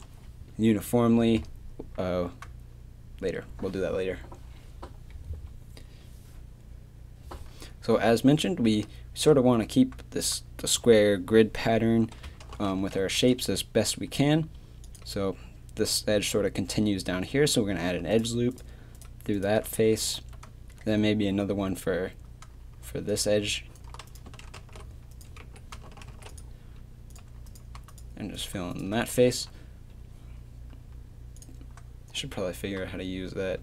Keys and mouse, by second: 3.5 a, 12.8 ctrl+r, 19.8 f, 20.2 a, 22.9 d, 26.1 ctrl+r, 27.5-29.0 drag, 29.0 f, 29.3 a, 31.4 click.